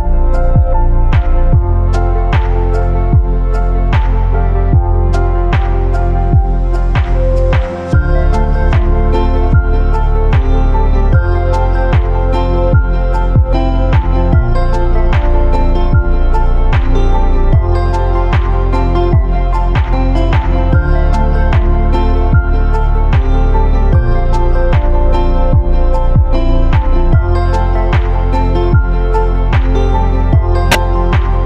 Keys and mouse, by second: 15.9-16.2 shift+middle drag, 17.0-20.5 shift+middle drag, 21.6 shift+middle click, 22.4-23.1 shift+middle drag, 24.4-28.8 shift+middle drag, 30.0-31.4 shift+middle drag.